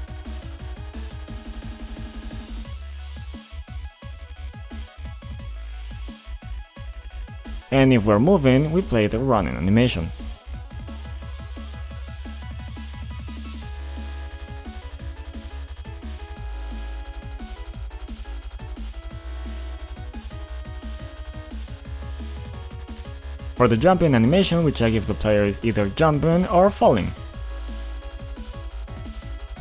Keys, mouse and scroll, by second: 0.2 click, 0.3 click, 0.5 double click, 1.2-2.6 typing, 3.2 Return, 7.9 click, 8.4 ctrl+click, 9.5 click, 10.1 i, 10.4 click, 11.2 click, 11.2-11.9 typing, 13.3-13.7 scroll up 1, 13.7 right click, 14.7 click, 17.6 click, 17.7 click, 19.1-20.3 typing, 21.8 click, 23.4 click, 24.3 click, 25.4 click, 25.6 double click, 27.7 click, 28.7 double click, 28.9 ctrl+click, 29.4 click, 29.5 double click.